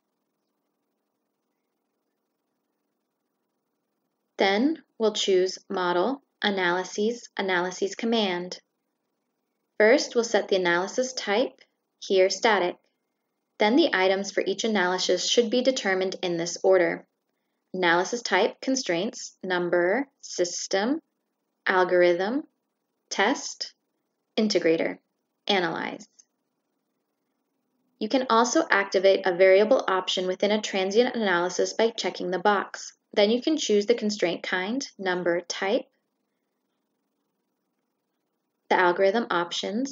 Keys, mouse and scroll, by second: 5.7 click, 9.4 click, 20.4-21.8 drag, 25.6 click, 25.9-26.9 drag, 28.8 click, 30.8 click, 32.0 click, 32.9 shift+click, 33.9 shift+click, 35.5 shift+click, 36.9-37.7 drag, 38.8 click.